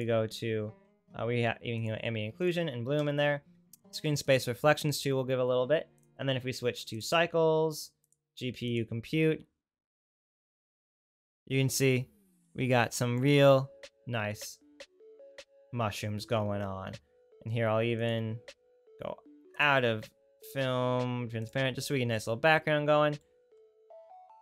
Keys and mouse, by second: 1.8 click, 1.8 right click, 4.3 click, 4.3 right click, 6.1-13.1 drag, 6.1-13.1 right drag, 18.1-19.5 right drag, 19.7 right click, 21.5 right click, 22.3 right click.